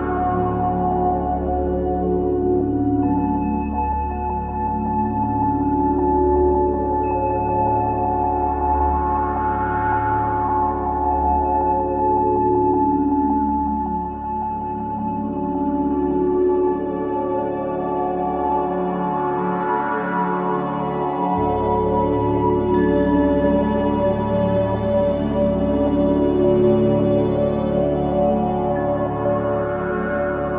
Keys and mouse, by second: 1.9 shift+d, 4.1 r, 7.1 g, 18.2 click, 19.9 shift+d, 24.8 shift+d, 29.7 g.